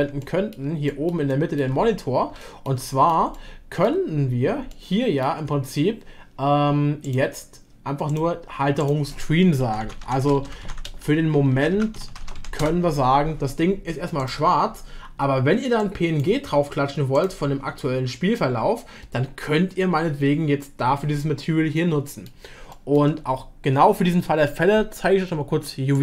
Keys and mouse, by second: 0.2 shift+middle click, 0.9 middle click, 1.3 shift+middle click, 2.4 shift+middle click, 2.9 middle click, 3.3 shift+middle click, 4.7-5.4 shift+middle drag, 7.0-8.3 middle drag, 8.8-13.3 middle drag, 12.2 e, 17.9 middle click, 21.2-21.8 middle drag, 21.8 click, 21.8 right click, 22.7 shift+drag, 22.7 shift+right drag.